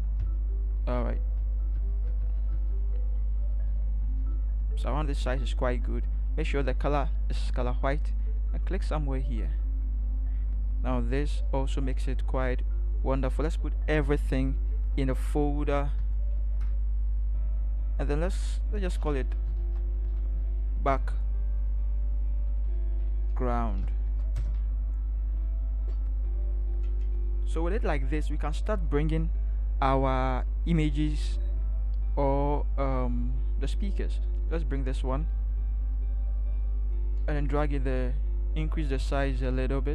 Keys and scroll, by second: 1.4-4.3 typing, 16.0 ctrl+shift+g, 19.2-20.8 typing, 22.5-24.5 typing.